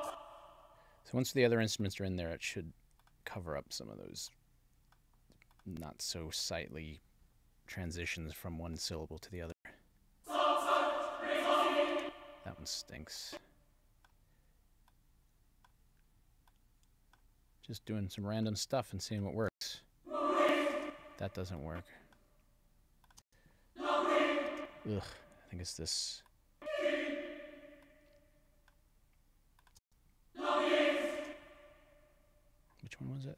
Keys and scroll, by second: 9.5 space, 11.9 space, 19.5 space, 20.7 space, 23.2 space, 24.5 space, 29.8 space, 31.2 space.